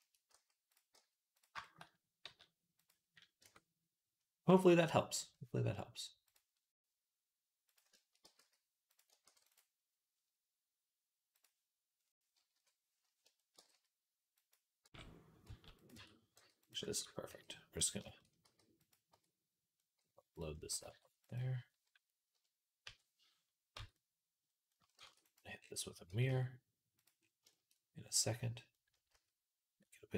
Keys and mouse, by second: 0.1 s, 0.8 g, 1.6 middle click, 2.1 s, 3.2 Tab, 3.2-6.1 middle drag, 6.1-7.6 drag, 7.6-11.2 shift+middle drag, 8.1 g, 9.1 ctrl+r, 11.2-12.4 drag, 12.4 KP_3, 13.1-14.3 shift+drag, 13.4 g, 14.3-16.2 middle drag, 14.7 g, 15.8 Tab, 16.2 g, 16.7 shift+middle click, 17.1 g, 18.3 g, 18.8 click, 19.0 Tab, 20.5 g, 22.2 click, 22.2 KP_1, 22.7 KP_3, 23.6 Tab, 24.5 click, 24.8 shift+d, 25.4 click, 25.9 g, 27.0 shift+click, 28.6-30.1 drag, 28.9 s.